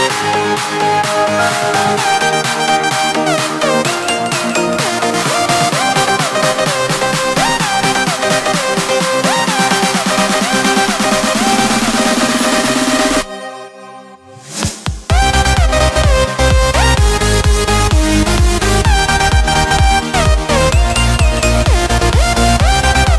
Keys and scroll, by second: 11.9 ctrl+space, 16.7 ctrl+space.